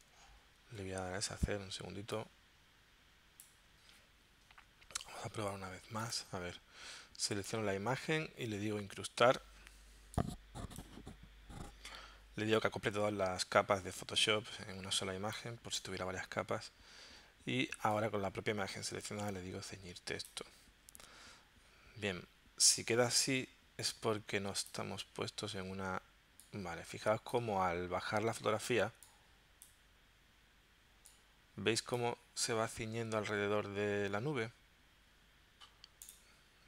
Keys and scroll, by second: 0.3 super+z.